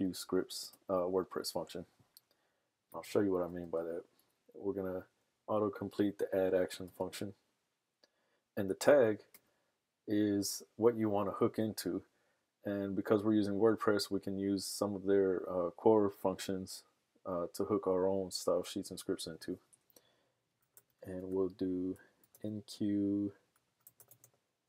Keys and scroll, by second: 2.9-4.1 typing, 20.4-24.6 typing.